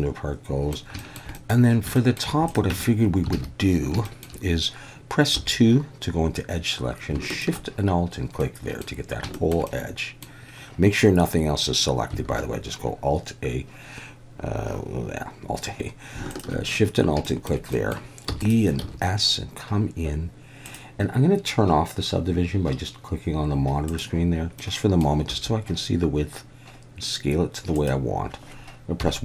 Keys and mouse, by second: 1.0 shift+middle click, 1.3 middle click, 1.9 shift+middle drag, 2.5 drag, 2.7 Tab, 3.3 alt+a, 4.0 shift+middle click, 5.3 2, 7.3 alt+shift+click, 8.4 middle click, 9.3 shift+middle click, 9.7 middle click, 12.3 alt+a, 16.3 alt+shift+click, 17.2 shift+middle click, 17.7 middle click, 18.3 e, 18.4 click, 18.8 s, 20.7 click, 24.6 middle click, 25.3 s, 27.8 click, 29.0 KP_1.